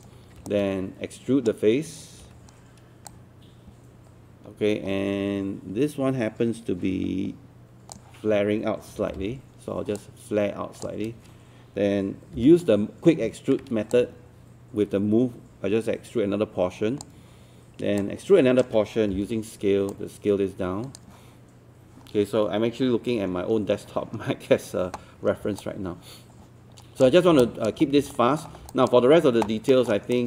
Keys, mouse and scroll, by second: 0.5-1.9 shift+right drag, 2.3 w, 3.1-8.9 drag, 9.0 e, 10.0 click, 12.4 w, 13.9-17.0 shift+drag, 18.0 shift+click, 19.9-21.9 drag, 23.4-23.8 scroll down 1, 23.8-25.3 scroll up 1, 25.3 scroll down 1, 25.6-27.0 alt+drag, 27.4 alt+click, 27.8 scroll up 1, 28.1 alt+middle click, 28.7 alt+click, 29.7 alt+middle click, 30.1 right click.